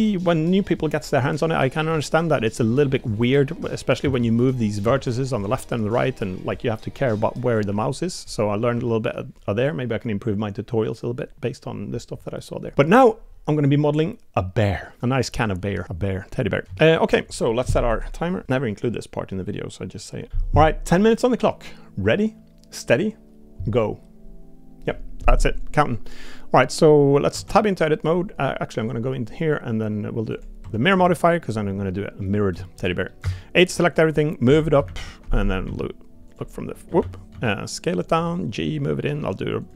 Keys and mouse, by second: 3.6 Tab, 4.0 a, 4.8 a, 7.7 g, 8.7 Tab, 9.5 click, 16.9 shift+middle drag, 27.3 Tab, 28.8 click, 30.3 click, 30.6 Tab, 30.9 Tab, 31.1 middle click, 31.9 middle click, 32.6 shift+middle click, 32.9 middle click, 33.2 a, 33.9 click, 35.6 s, 37.0 ctrl+z, 37.3 s, 38.1 g.